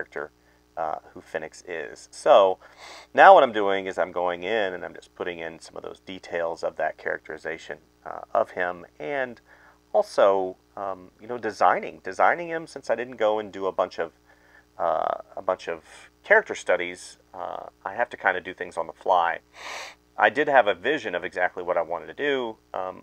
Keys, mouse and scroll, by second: 0.0-3.6 typing, 4.7 space, 5.4 space, 5.8 space, 6.1 space, 7.3-12.0 typing, 10.9 ctrl+z, 11.4 ctrl+z, 12.8 ctrl+z, 13.5 space, 14.2 ctrl+z, 14.6-19.4 typing, 20.7 space, 22.2 space, 22.9 space.